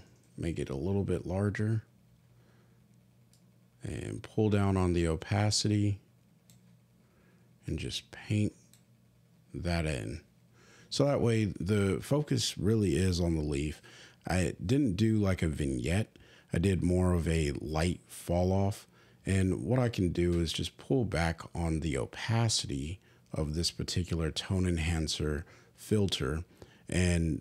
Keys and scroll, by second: 0.4 ].